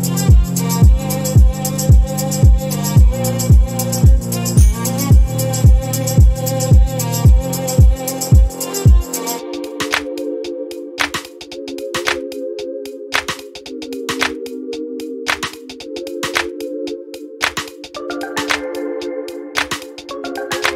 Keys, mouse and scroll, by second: 0.7 click, 2.5 click, 6.4 click, 7.7 shift+click, 8.9 click, 9.8-10.7 typing, 12.2 click, 13.6-15.3 ctrl+shift+drag, 16.1-16.9 drag, 17.2 ctrl+scroll up 2, 18.0-20.7 ctrl+drag.